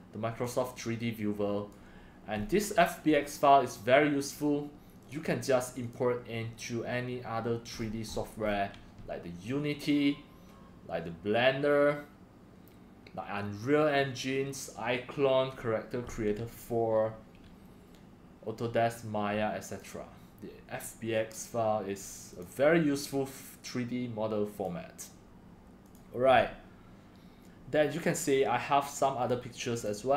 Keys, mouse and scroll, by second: 0.0-1.7 drag, 2.4 scroll down 5, 2.6 scroll, 2.7 middle click, 2.7 scroll up 3, 3.7 scroll, 4.3 click, 5.0-7.8 drag, 7.8-8.4 scroll down 12, 8.4-8.7 scroll, 19.8-21.7 drag, 25.9 click.